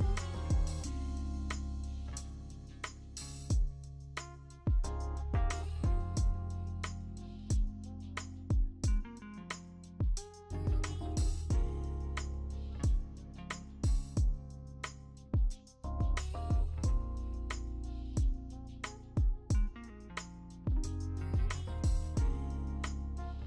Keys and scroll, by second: 0.0-0.8 typing, 2.8-5.6 typing, 7.0 ctrl+alt+z, 10.2 b, 11.6 v, 12.6 b, 13.8 ctrl+z, 14.9 1, 17.5 d, 19.1 Return.